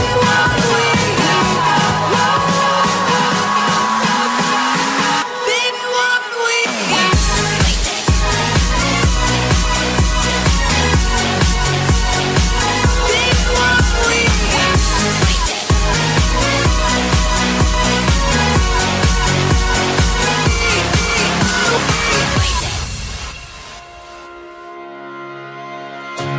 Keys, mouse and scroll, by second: 0.0-3.8 typing, 0.5 click, 1.2 click, 1.4 click, 2.0 right click, 2.6 right click, 2.9 click, 4.0 click, 4.8 click, 5.0-6.1 typing, 5.8 ctrl+s, 5.8 click, 6.0 Tab, 6.2 Tab, 6.2 right click, 6.8 alt+a, 6.8 click, 6.9 ctrl+Tab, 6.9 right click, 7.4 Tab, 7.4 right click, 7.7 click, 8.0 ctrl+x, 8.2 ctrl+z, 8.2 right click, 8.5 ctrl+x, 8.5 ctrl+z, 8.6 ctrl+z, 8.9 click, 8.9 right click, 9.3 g, 9.6 o, 10.2 Tab, 10.2 ctrl+s, 10.5 right click, 10.8 i, 10.9 x, 11.3 ctrl+Tab, 11.4 right click, 11.7 click, 12.0-16.1 typing, 12.1 right click, 12.6 middle click, 12.8 right click, 13.0-14.2 right drag, 14.2 middle click, 14.9-16.0 right drag, 15.6 ctrl+z, 16.2 right click, 16.8 ctrl+r, 16.8 right click, 17.0 ctrl+x, 17.2 ctrl+s, 17.4 right click, 17.7 ctrl+x, 18.0 ctrl+r, 18.4 g, 18.5 ctrl+Tab, 18.5 right click, 18.8 j, 19.0 right click, 19.3 middle click, 20.0 ctrl+z, 20.4-23.6 typing, 20.5-22.1 right drag, 20.6 ctrl+r, 21.0 ctrl+Tab, 22.1 middle click, 22.4-23.6 right drag, 24.5 middle click, 24.8 ctrl+r, 25.0 ctrl+z, 25.0 middle click, 25.2 right click, 25.4 ctrl+x, 25.6 Tab, 25.7 ctrl+s, 25.7 alt+h, 26.0 middle click, 26.1 right click.